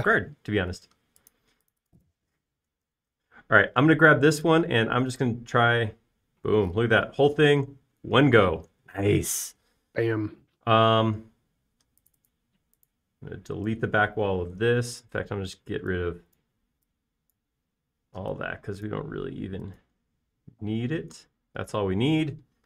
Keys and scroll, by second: 4.6 b, 9.1 space, 15.3 BackSpace, 16.5 e, 21.2 space.